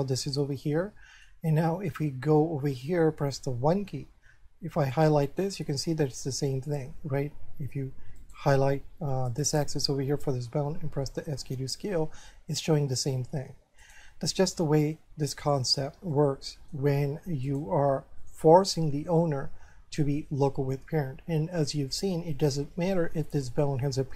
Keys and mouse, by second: 0.6 shift+middle click, 2.4 shift+middle click, 4.9 right click, 5.5 middle click, 8.2 right click, 9.3 right click, 11.2 s, 14.1 right click, 14.8 shift+middle click, 16.1 shift+middle click, 17.5 right click, 18.2 shift+middle click.